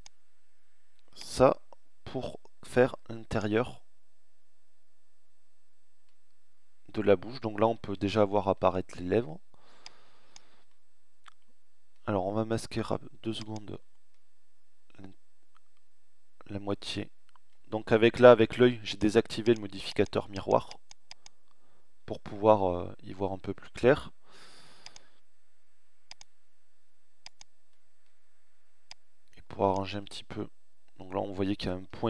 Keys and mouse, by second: 2.8 middle click, 4.0 middle click, 6.6-7.6 middle drag, 9.7 middle click, 15.7 middle click, 21.4 middle click, 25.1 middle click, 25.6 middle click, 26.8-28.8 middle drag, 31.4 ctrl+z.